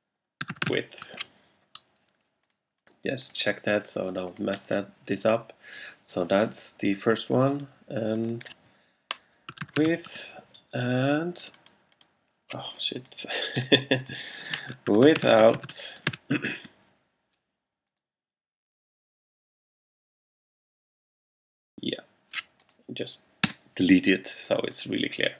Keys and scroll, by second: 0.3-1.4 typing, 9.4-10.4 typing, 13.6 BackSpace, 14.7-16.7 typing, 23.5 BackSpace.